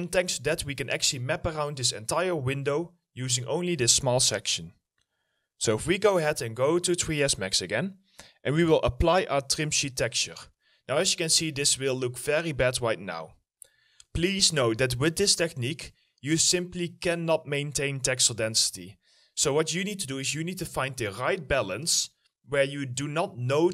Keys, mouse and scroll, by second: 6.3 middle click, 10.4 middle click, 11.0 alt+middle click, 13.5 middle click.